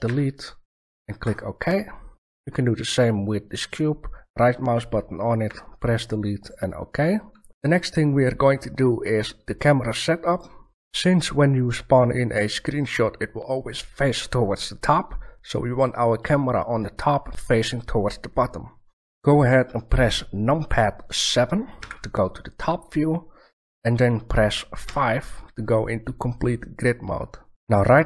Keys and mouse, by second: 0.0 Delete, 2.5 right click, 5.4 Delete, 6.4 click, 7.5 shift+s, 21.7 KP_7, 24.8 KP_5.